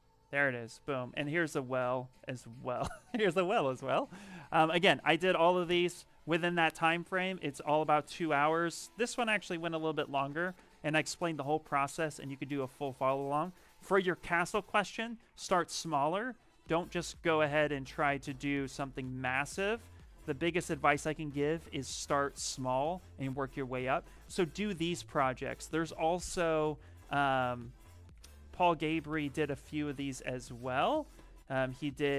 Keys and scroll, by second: 5.3 ctrl+v, 19.9 ctrl+v, 20.6 Return, 28.1 a, 28.8 l, 29.0 Return.